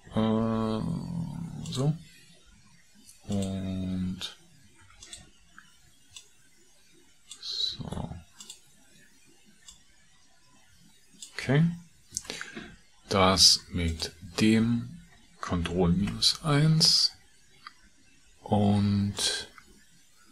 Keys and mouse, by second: 0.6 s, 12.1 Tab, 16.0 ctrl+KP_Subtract, 19.2 click.